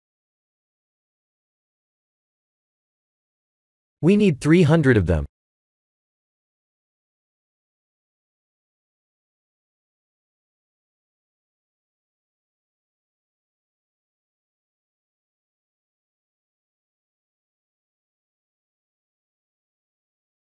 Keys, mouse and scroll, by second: 2.8 middle click, 4.5 click, 5.7 0, 7.3-8.4 scroll down 8, 8.2 middle click, 9.7-10.1 scroll down 4, 10.4-11.2 scroll up 10, 11.4 middle click, 15.6 click, 16.3 middle click, 16.9 scroll up 2, 18.3 click, 18.3 scroll up 1, 18.9 Tab.